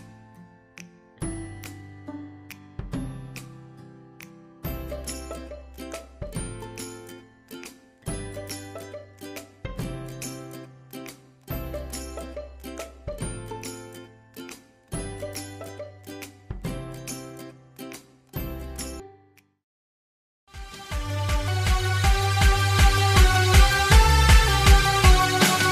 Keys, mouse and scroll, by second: 0.1 typing, 0.7 scroll down 1, 1.7-4.5 drag, 6.6 right click, 7.6 click, 8.7 right click, 9.1 scroll down 1, 9.6 click, 10.9 ctrl+g, 11.3 p, 12.2 click, 13.4-13.9 scroll up 1, 13.4 typing, 14.8 F4, 15.3 scroll down 1, 15.3 typing, 16.9 F4, 16.9-17.4 typing, 17.4 F9.